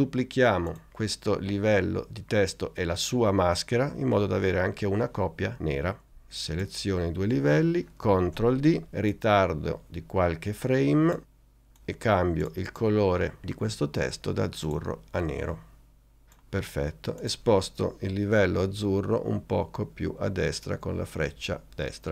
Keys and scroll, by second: 8.4 shift+super+d, 20.1 Right, 21.7 Right.